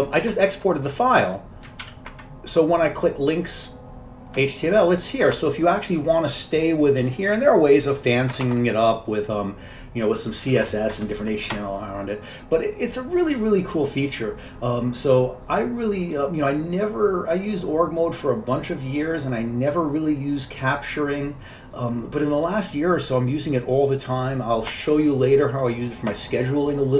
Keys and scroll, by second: 2.0 ctrl+w.